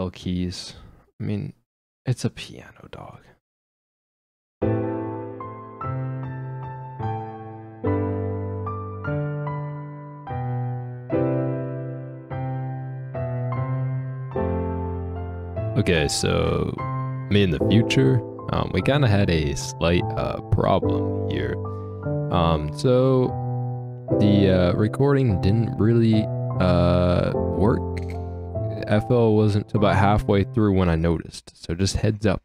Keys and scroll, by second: 0.8 Down.